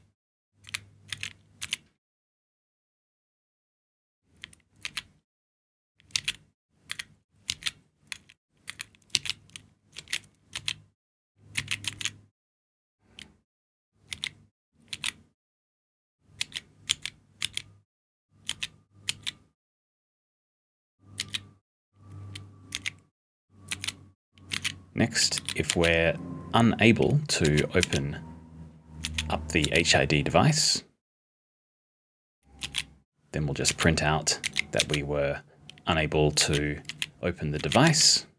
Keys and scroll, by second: 0.0-0.2 typing, 4.6-7.5 typing, 8.6 *, 9.1 d, 10.0 d, 10.5 l, 13.8-15.1 typing, 18.2-19.6 typing, 22.7-26.2 typing, 27.8 b, 29.0-30.1 typing, 33.6 b, 34.4 s, 34.8 b, 36.4-38.3 typing.